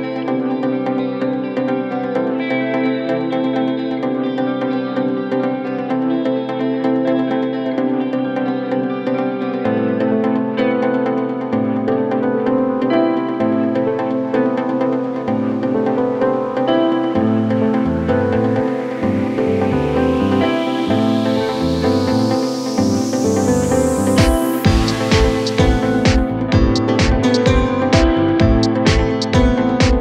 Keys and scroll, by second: 8.9 shift+i.